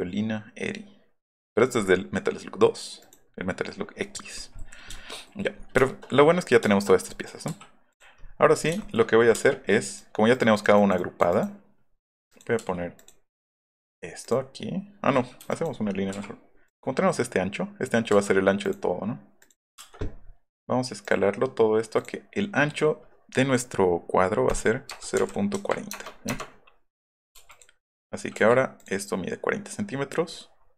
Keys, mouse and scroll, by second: 1.8 click, 3.3 middle click, 3.7 middle click, 4.0 middle click, 5.7 shift+middle click, 6.6 shift+middle click, 7.1 click, 7.5 m, 7.9 click, 9.3 space, 9.8 click, 10.3 click, 10.5 click, 10.7 click, 13.0 click, 14.2 click, 15.3 e, 15.4 click, 16.1 l, 16.6 click, 18.2 Escape, 18.6 click, 19.4 click, 19.7 space, 21.0 click, 21.9 click, 24.5 click, 25.2 KP_Decimal, 25.9 KP_Enter, 26.3 KP_Enter, 27.4 e, 27.5 click, 27.9 middle click, 28.4 l, 30.2 middle click, 30.5 middle click.